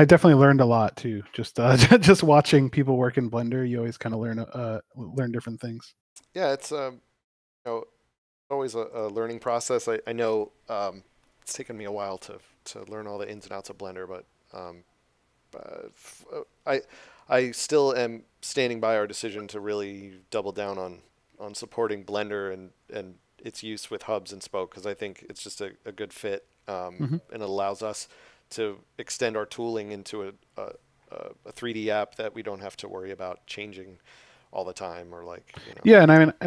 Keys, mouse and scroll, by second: 0.3 scroll up 1, 4.8 click, 8.9 click.